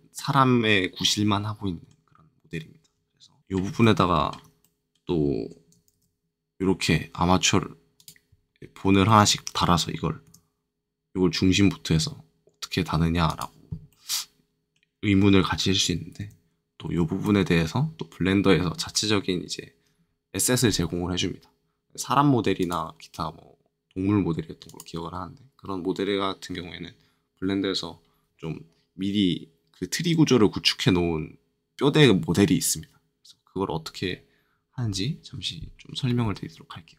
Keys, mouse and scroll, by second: 3.4 shift+scroll up 1, 5.9 shift+a, 7.9-9.0 drag, 10.2 g, 13.2 click, 13.9 middle click, 16.2 ctrl+z, 16.8 ctrl+z, 22.6-28.7 drag.